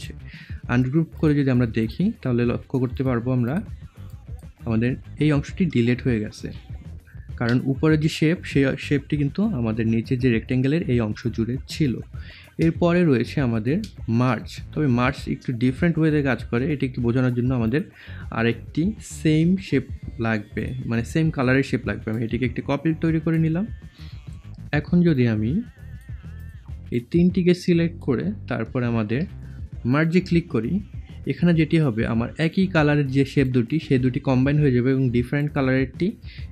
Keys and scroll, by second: 7.3 ctrl+z.